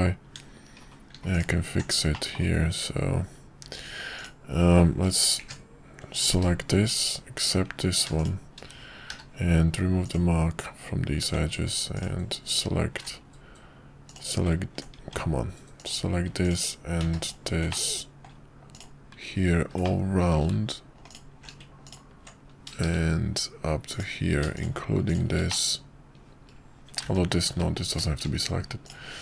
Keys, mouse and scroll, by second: 0.2 Tab, 1.3 alt+click, 2.1 middle click, 3.6 Tab, 4.2 click, 5.4 ctrl+KP_Add, 7.6 Tab, 8.2 shift+click, 9.1 q, 11.2 Tab, 11.9 alt+click, 14.1 click, 14.9 Tab, 15.8 click, 16.4 click, 17.1 ctrl+z, 17.7 middle click, 18.7 ctrl+click, 19.9 middle click, 21.0 alt+shift+click, 23.9 ctrl+click, 25.1 shift+click, 25.5-27.0 middle drag, 27.1 ctrl+z, 28.8 click.